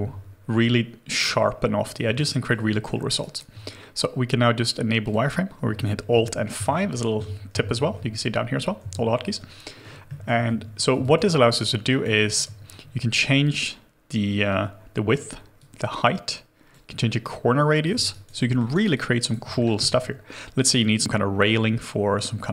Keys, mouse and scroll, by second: 2.1 alt+click, 2.9 alt+middle click, 3.2 alt+right click, 6.5 alt+5, 8.8 alt+5, 10.0 alt+middle click, 10.5 shift+g, 11.4 alt+click, 11.8 alt+click, 12.1 alt+middle click, 18.1 alt+right click, 18.3 alt+middle click, 18.7 alt+right click, 18.9 alt+click, 19.4 alt+middle click.